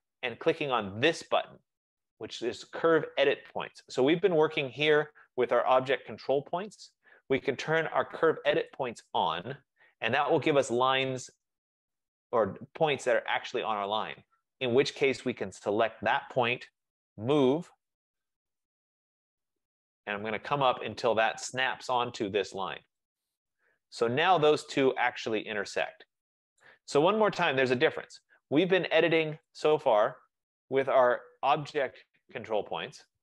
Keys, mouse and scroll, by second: 8.8-13.8 drag, 13.9-15.5 drag, 16.8-17.1 typing, 20.1-22.2 drag, 23.4 click, 24.5-26.3 drag, 24.5-26.3 middle drag, 26.7 right click, 27.6 Escape, 27.8 Escape, 28.0 Escape, 29.6 click, 30.2 click.